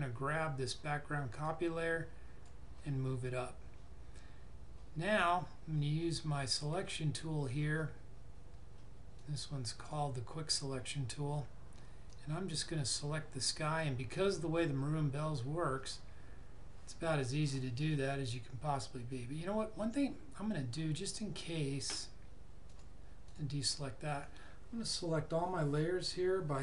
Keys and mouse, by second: 6.4 click, 22.6 click.